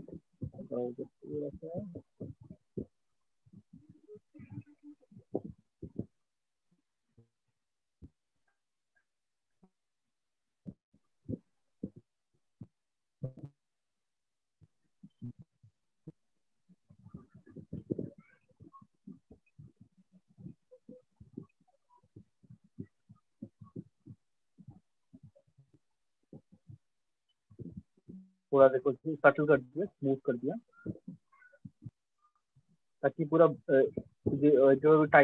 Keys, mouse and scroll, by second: 2.4 alt+click, 5.4 click, 10.5 click, 12.5 click, 13.4 alt+click, 15.4 click, 16.4 click, 16.7 alt+click, 22.8 click, 23.7 alt+click, 28.6 click, 29.8 alt+click, 31.4 click, 32.4 shift+click, 33.4 alt+click.